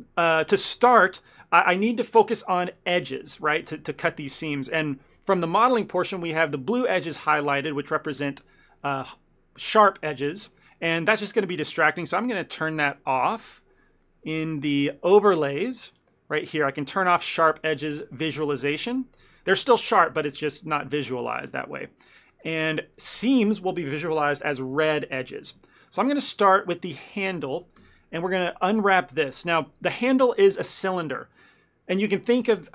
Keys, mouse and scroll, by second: 0.1 middle click, 2.4 2, 3.7 ctrl+middle click, 12.8 n, 13.4 n, 14.1 middle click, 15.5 click, 21.4 shift+middle click, 21.9 middle click, 22.4 shift+middle click, 22.7 ctrl+middle click, 26.0 shift+middle click, 26.4 ctrl+middle click, 26.6 middle click, 27.1 click, 27.9 ctrl+l.